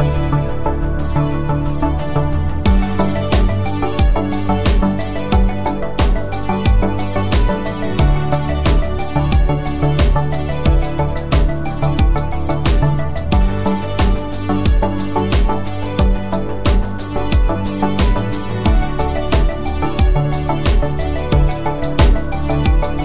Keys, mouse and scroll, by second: 4.3-5.9 click, 13.4 space.